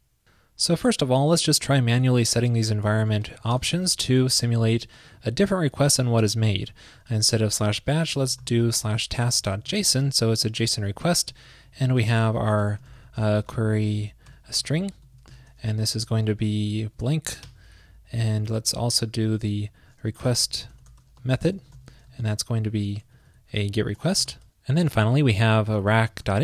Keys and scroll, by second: 3.2 super+c, 3.7 super+v, 6.4 super+Right, 6.9 alt+shift+Left, 11.1 ctrl+shift+d, 11.5 super+Left, 12.2 Right, 15.8 super+Right, 16.4 alt+shift+Left, 16.4 alt+shift+Left, 19.0 ctrl+shift+d, 19.3 alt+Left, 19.3 alt+Left, 19.8 ctrl+alt+Left, 22.7 super+Right, 23.2 ctrl+alt+shift+Left, 25.3 ctrl+shift+d, 25.5 alt+Left, 25.6 alt+Left, 26.0 alt+Left.